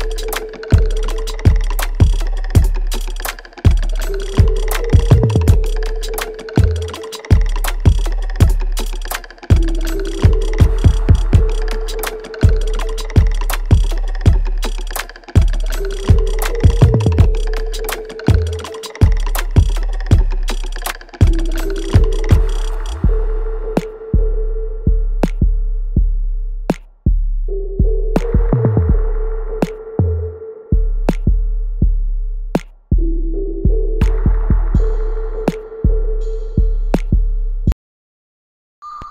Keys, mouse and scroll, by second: 1.6 e, 2.9-4.6 drag, 4.6 ctrl+z, 12.4 right click, 12.9 click, 13.7 alt+right click, 14.4-16.6 alt+drag, 16.6 alt+click, 18.6-21.7 alt+right drag, 21.7-23.3 alt+drag, 24.1-28.2 alt+drag, 28.2-29.9 alt+middle drag, 29.9 click, 31.7-36.7 ctrl+drag, 37.5-39.1 ctrl+drag.